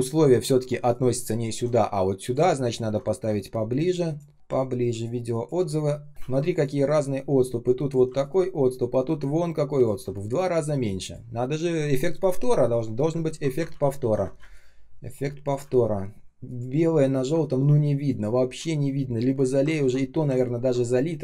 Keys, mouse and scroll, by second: 3.2 space, 3.6 space, 3.7 space, 6.0 typing, 6.4 ctrl+z, 8.1 alt+click, 13.2 ctrl+z, 14.3 space, 14.8 space, 15.2 space, 15.6 ctrl+scroll up 1, 16.9 ctrl+scroll down 1, 17.6 shift+0, 18.7 ctrl+scroll up 1, 19.7 shift+x, 20.4 ctrl+scroll down 1, 20.7 shift+0.